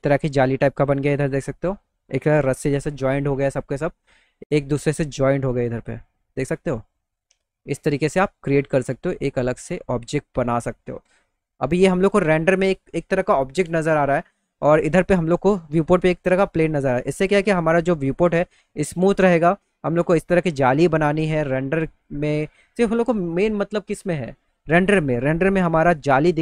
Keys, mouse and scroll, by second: 8.0 middle click, 8.5 middle click, 8.9 middle click, 17.9 alt+middle click, 19.3 alt+middle click.